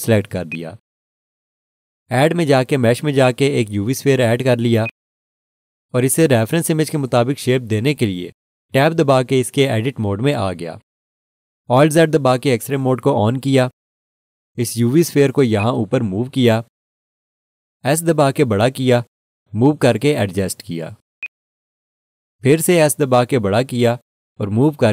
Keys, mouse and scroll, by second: 2.5 click, 10.2 Tab, 13.2 alt+z, 15.6 click, 21.2 click.